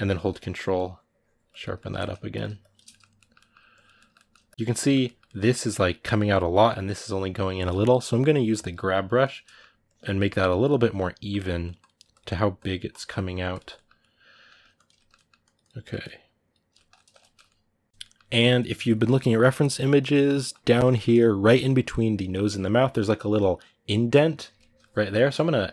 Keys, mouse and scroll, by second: 1.5 ctrl+middle click, 2.1 shift+click, 2.7 middle click, 3.5 click, 3.7 ctrl+middle click, 4.2 shift+click, 4.5-5.8 middle drag, 5.8 click, 6.4-8.3 middle drag, 8.3 g, 9.0 click, 9.2 middle click, 9.6 click, 10.6 middle click, 11.1-13.5 drag, 13.5-14.6 middle drag, 14.6 click, 14.7 ctrl+middle click, 15.2-16.5 drag, 16.5-25.7 ctrl+middle drag.